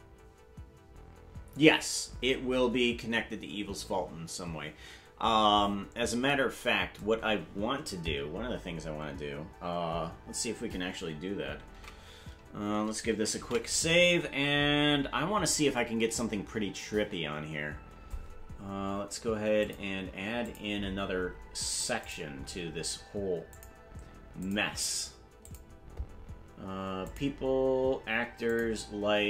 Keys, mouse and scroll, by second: 7.5-7.8 scroll down 4, 8.2-8.6 scroll down 4, 11.8 ctrl+Tab, 15.6 ctrl+s, 19.6 click, 20.4 click, 20.8-21.2 scroll up 10, 22.0 click, 22.4-22.7 scroll up 2, 23.5 click, 24.4 click, 25.4 click, 27.0 click, 28.5 click.